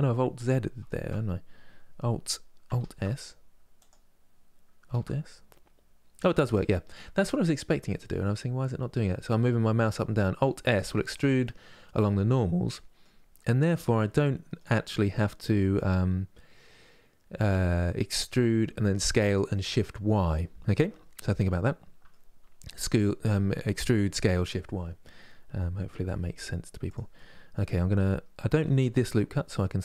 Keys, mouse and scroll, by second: 4.6 alt+s, 11.1-12.9 middle drag, 12.9-13.5 scroll up 2, 13.5-16.6 middle drag, 17.2-20.3 middle drag, 20.8-28.5 middle drag, 28.5 2, 29.5-29.8 alt+drag.